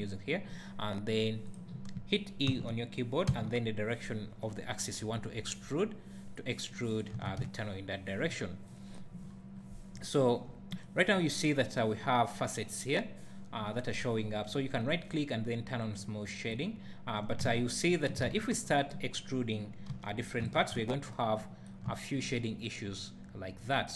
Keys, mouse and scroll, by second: 2.5 e, 6.9 click, 7.1 Tab, 7.3 `, 9.2-9.5 scroll down 1, 9.5-9.9 scroll up 1, 9.9 `, 13.5 `, 14.8-18.8 right drag, 16.7 `, 17.5 Tab, 18.3 alt+a, 18.5 3, 18.8 click, 19.9 e, 20.5 click, 20.5 Tab, 20.8 `, 21.9 `.